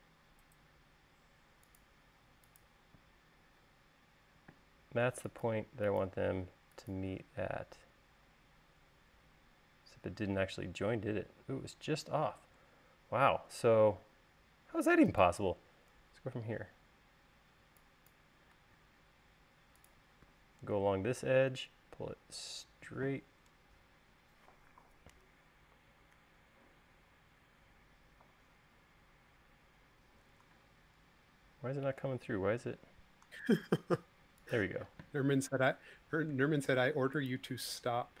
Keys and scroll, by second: 0.9 l, 3.3 e, 5.0 space, 13.2 l, 17.9 e, 19.0 l, 26.5 Page_Down, 29.0 Page_Down, 35.4 e, 37.1 space.